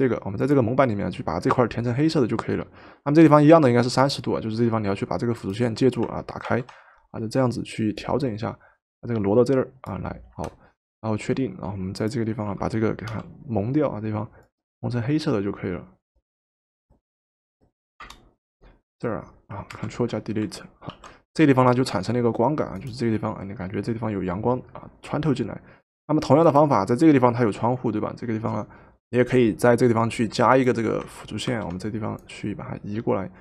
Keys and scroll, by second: 6.5 ctrl+t, 10.3 Return, 13.1 |, 18.1 Return, 19.7 ctrl+Delete, 20.9 ctrl+d, 31.5 ctrl+t.